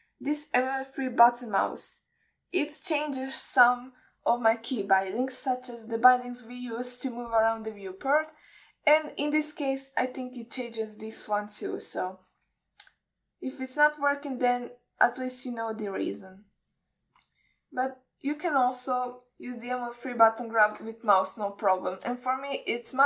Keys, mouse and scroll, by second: 18.9-19.5 middle drag, 21.2-21.7 scroll down 1, 21.7-22.1 middle drag, 22.6 alt+shift+middle click.